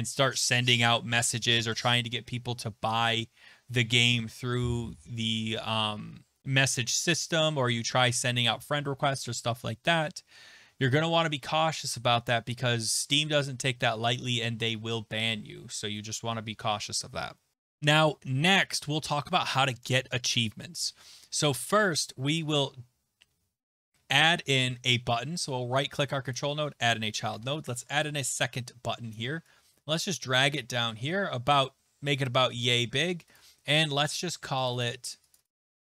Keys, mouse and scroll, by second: 17.7-20.4 scroll down 5, 22.4 click, 24.6 right click, 26.3 click, 27.5 Return, 29.1 click, 30.5 click, 33.0 click, 33.4 click, 34.7 click, 34.8 click, 35.3 click, 35.4 click, 35.8-35.9 typing.